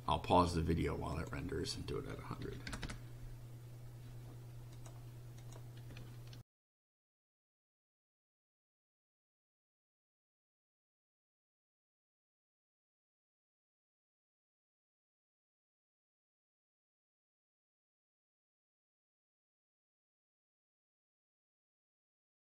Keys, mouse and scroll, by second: 1.1 click, 2.4 1, 2.7 0, 4.8 click, 5.4 click, 6.4 ctrl+r, 13.2-15.2 drag, 21.5 click.